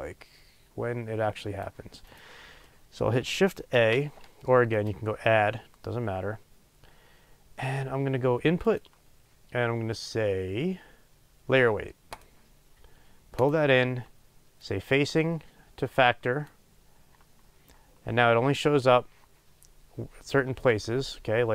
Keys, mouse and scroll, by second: 16.5-21.5 drag.